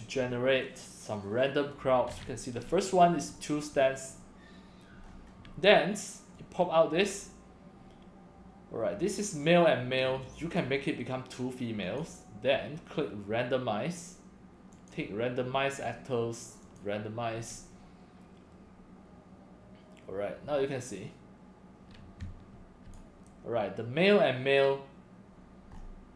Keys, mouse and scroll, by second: 5.0 scroll up 1, 6.3 click, 7.5 drag, 10.4 click, 11.8 click, 14.7 click, 16.6 click, 22.2-22.9 drag, 25.7 scroll up 2.